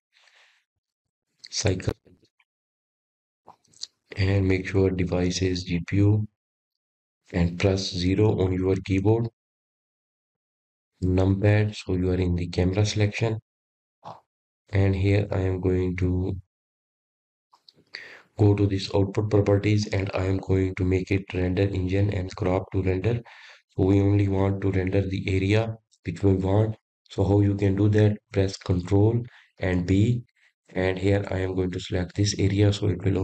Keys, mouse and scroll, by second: 0.3-0.8 scroll up 7, 0.8-4.0 drag, 7.3-10.3 drag, 14.6 KP_0, 16.6-19.7 scroll up 9, 19.7-20.3 scroll down 4, 20.3-21.9 scroll up 4, 21.9 click, 24.6 click, 26.1 click, 32.8 ctrl+b.